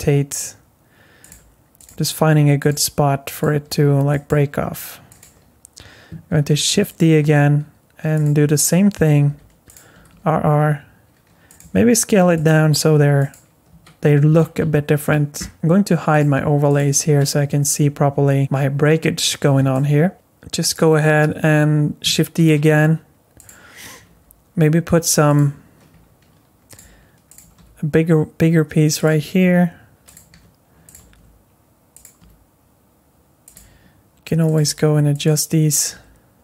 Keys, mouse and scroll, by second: 1.3-4.5 typing, 6.3 shift+d, 7.2 r, 9.3 g, 9.9 r, 11.6 s, 12.5 g, 13.7 Tab, 14.3 Tab, 16.1 click, 16.7 click, 17.8-18.4 scroll up 1, 19.7 shift+middle click, 20.1 click, 20.6 click, 22.4 shift+d, 24.0 g, 25.9 s, 26.8 g, 27.4 r, 29.4 g, 30.3 s, 31.0 r, 32.2 r, 33.5 g, 34.6 r, 35.9 g.